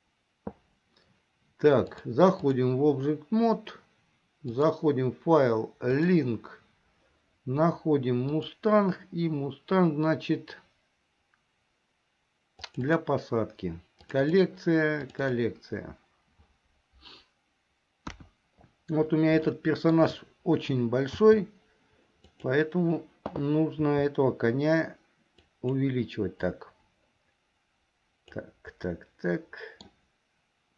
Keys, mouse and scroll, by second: 2.0 click, 4.5-6.5 drag, 18.1 KP_1, 19.7 shift+middle click, 21.2 s, 23.9 s, 26.6-28.5 drag, 29.0-30.1 middle drag.